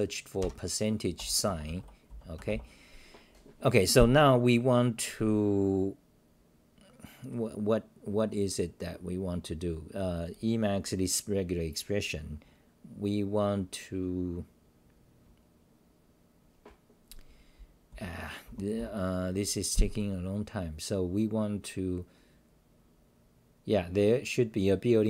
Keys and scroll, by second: 1.4-2.6 typing, 6.6 o.